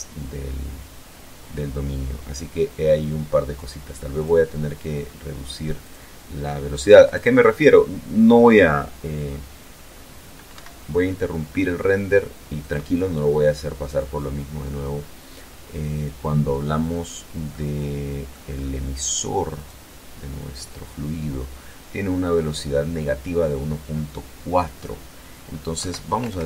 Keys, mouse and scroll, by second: 2.9 click, 4.6 click, 5.8 right click, 9.3 Escape, 11.4 click, 16.2-17.2 middle drag, 17.2-17.7 scroll up 1, 18.3 right click, 21.2 click, 24.5 Right, 24.9 BackSpace.